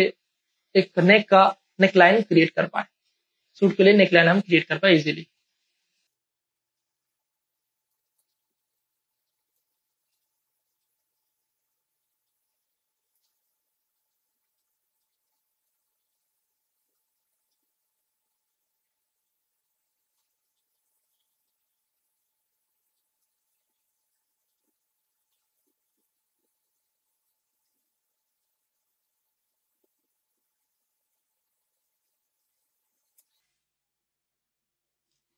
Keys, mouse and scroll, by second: 2.4 space, 2.5 click, 2.9 space, 4.2 alt+click, 5.5 click, 6.1 space, 6.2 click, 6.4 ctrl+click, 6.7 click, 7.5 click, 7.9 space, 7.9 click, 8.2 ctrl+z, 8.5 click, 9.5 ctrl+space, 9.7 click, 9.9-12.9 ctrl+drag, 12.9 click, 13.1 space, 13.7 click, 14.7 click, 14.7 space, 15.0 click, 15.6 ctrl+z, 15.9 click, 16.6 click, 17.0 space, 17.1 click, 17.6 ctrl+click, 18.1-19.5 ctrl+drag, 19.5 ctrl+space, 19.6 ctrl+click, 19.8 click, 20.0 ctrl+click, 20.5 click, 20.8 ctrl+z, 21.3 click, 21.9 click, 22.8 space, 22.9 click, 23.5 ctrl+click, 23.9 ctrl+space, 24.0 ctrl+click, 24.3 click, 24.4 ctrl+space, 24.6 ctrl+click, 26.0 space, 26.1-30.1 ctrl+drag, 30.1 space, 30.6-31.9 ctrl+drag, 31.9 shift+click, 32.1 space, 32.1 ctrl+click, 32.3 click, 35.2 space.